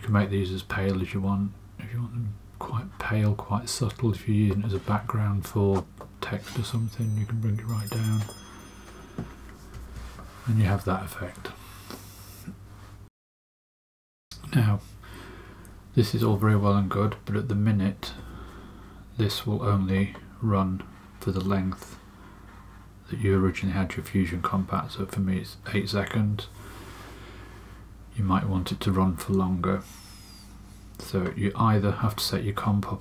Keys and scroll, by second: 9.7 space, 18.0 space.